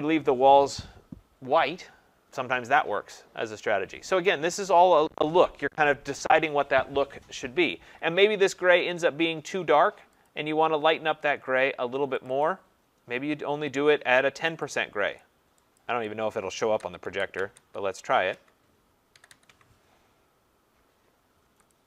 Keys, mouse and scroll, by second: 10.3 click, 12.3 click, 12.4 click, 15.2 click, 15.8 click, 16.3 click, 16.8 typing, 17.1 Tab, 17.4 Tab, 18.3 Tab, 18.8-19.8 typing, 21.7 click.